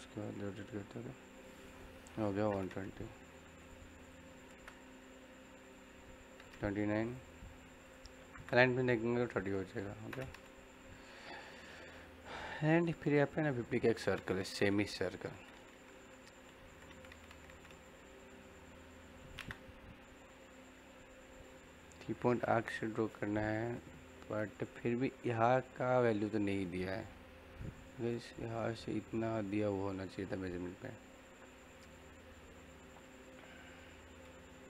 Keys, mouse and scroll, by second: 0.1 click, 3.5 click, 4.4 space, 5.5 click, 8.3 space, 9.1 click, 10.5-13.4 middle drag, 19.1 c, 19.3 space, 30.6-33.4 middle drag.